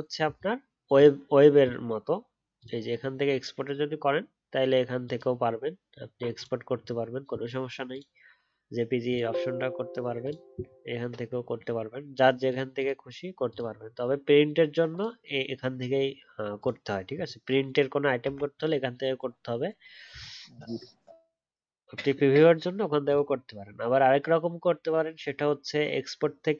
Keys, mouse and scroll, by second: 20.1-20.4 alt+scroll up 1, 20.4-23.1 alt+scroll down 1.